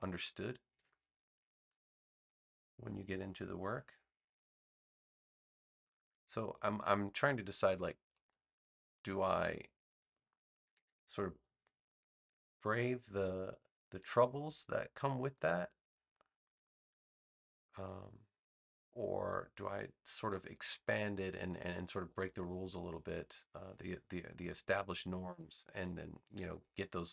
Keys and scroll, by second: 0.7 super+g, 26.3 BackSpace.